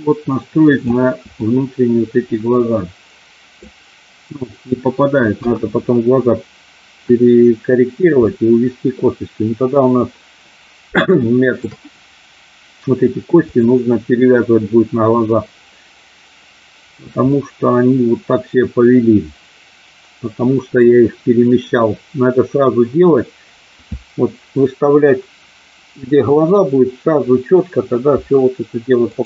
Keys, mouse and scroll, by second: 1.5-3.6 middle drag, 5.3 KP_1, 8.3 middle click, 11.2 shift+middle click, 13.5 click, 17.4-20.7 middle drag, 29.1 click.